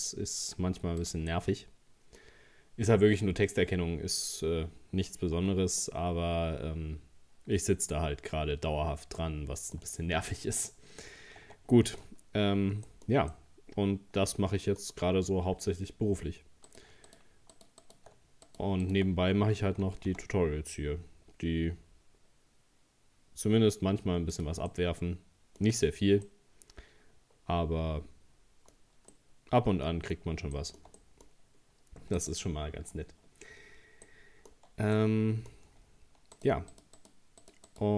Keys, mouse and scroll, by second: 1.3-3.3 middle drag, 3.3-3.8 scroll down 2, 3.8-5.4 scroll up 2, 5.4 Tab, 5.8-8.8 middle drag, 10.1-10.8 scroll down 2, 10.8-11.2 scroll up 1, 11.4 Tab, 11.7 middle click, 12.0-12.5 scroll up 2, 12.5 scroll down 2, 12.9-16.3 shift+middle drag, 16.7 right click, 17.1 shift+right click, 17.5 shift+right click, 17.8 shift+right click, 18.5 shift+right click, 18.8 shift+right click, 19.9 g, 24.7-25.8 middle drag, 25.8 scroll down 1, 26.3-28.7 middle drag, 28.7-29.1 scroll up 2, 29.1-31.5 middle drag, 31.5 scroll up 1, 32.2 right click, 34.1 middle click, 34.6 scroll up 1, 35.0-36.4 middle drag, 36.4 shift+right click, 36.7 shift+right click, 37.0 shift+right click, 37.4 shift+right click, 37.7 shift+right click.